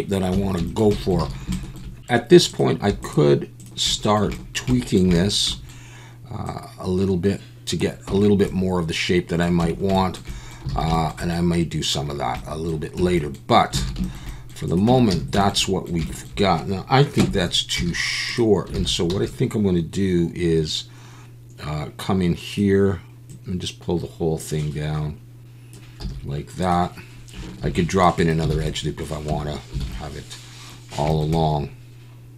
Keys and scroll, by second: 0.3 Tab, 1.2 alt+a, 8.1 Tab, 9.6 Tab, 10.7 alt+a, 13.0 Tab, 13.8 alt+a, 14.9 Tab, 15.1 a, 17.2 KP_3, 17.8 z, 18.8 alt+a, 19.1 b, 26.0 z, 27.6 ctrl+r, 28.5 alt+a, 29.3 Tab, 29.8 alt+a.